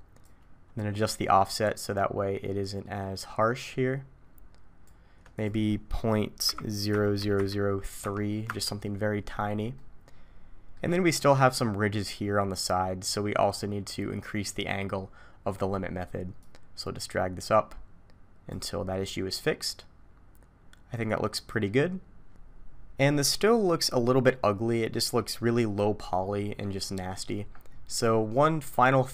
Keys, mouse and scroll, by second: 0.2 click, 5.3 click, 7.2 0, 9.8 middle click, 11.2 middle click, 13.3-14.3 scroll down 1, 14.3-15.7 scroll down 4, 16.4 click, 19.0 middle click, 23.2 middle click, 26.0 middle click, 28.0-29.0 scroll up 5, 29.0-29.1 scroll up 3.